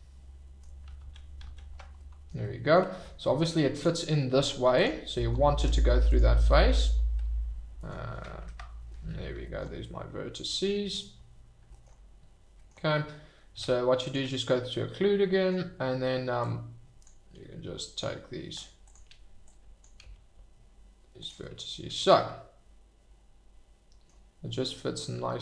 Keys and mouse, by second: 1.0 ctrl+z, 1.4 ctrl+z, 1.9-2.2 middle drag, 2.4-2.7 middle drag, 3.7 click, 4.7 click, 5.6 Tab, 8.4 alt+h, 9.5 shift+middle click, 12.5 shift+drag, 13.5 Tab, 16.4 click, 17.4 g, 18.8 click, 19.4 click, 21.2 click, 22.0 shift+middle click, 22.3-24.1 middle drag.